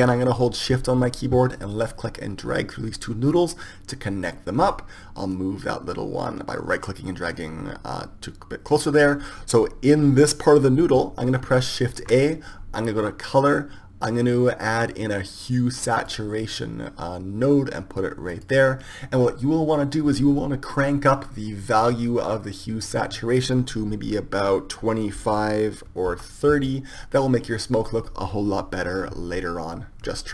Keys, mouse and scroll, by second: 3.4-5.2 drag, 5.3-8.8 drag, 6.3 right click, 12.0 shift+a, 22.3-24.2 drag.